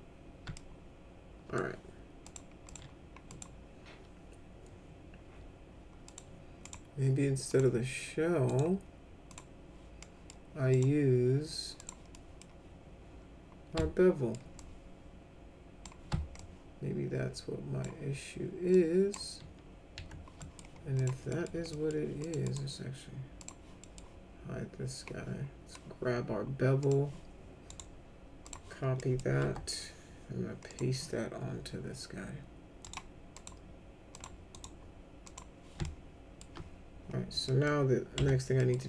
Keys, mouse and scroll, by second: 0.5-1.6 alt+middle drag, 2.2 click, 2.7 click, 3.3 click, 6.1 click, 6.6 right click, 7.5 click, 8.5 right click, 9.3 click, 10.0 middle click, 10.7 right click, 11.8 click, 12.1 middle click, 13.8 alt+middle click, 14.6-15.8 drag, 16.4-17.8 alt+drag, 18.7 alt+click, 20.0 alt+q, 20.4 middle click, 21.0 click, 21.3 middle click, 21.7 middle click, 22.2 click, 22.4 right click, 23.4 click, 23.8 middle click, 26.8 click, 27.7 right click, 28.4 click, 29.0 middle click, 29.5 F3, 30.7 click, 32.8 right click, 33.4 click, 34.2 click, 34.5 right click, 35.2 click, 35.8 alt+middle click, 37.5 middle click, 38.2 F3, 38.6 middle click.